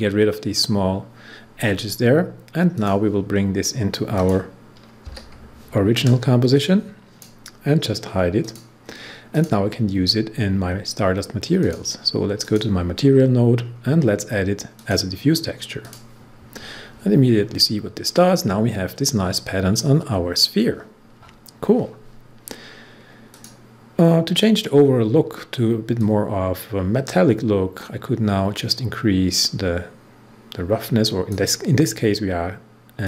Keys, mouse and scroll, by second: 2.7 click, 5.5 u, 6.5-8.4 drag, 11.6 click, 13.0 scroll down 1, 14.7 click, 15.8 click, 17.4 scroll up 1, 23.2 click, 23.8 scroll down 1, 24.6 scroll down 1, 25.9-33.0 drag.